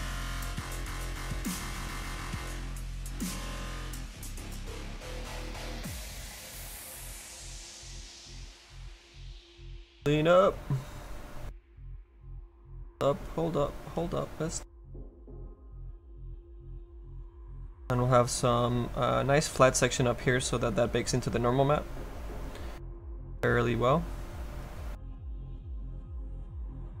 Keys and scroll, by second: 8.6 s, 10.0 F3.